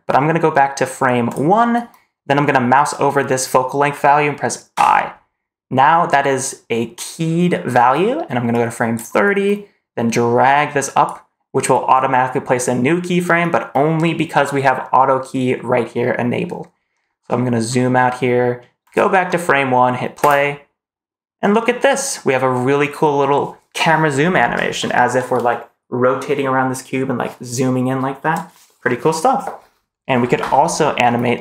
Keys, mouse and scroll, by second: 1.1 click, 4.6 i, 8.4 click, 10.0 click, 16.9-17.8 scroll down 5, 18.7 click, 20.1 space.